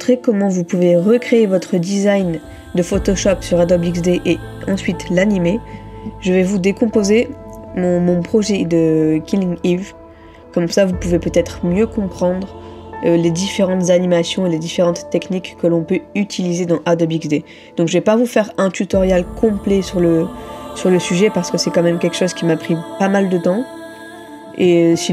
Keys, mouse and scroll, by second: 25.0 ctrl++.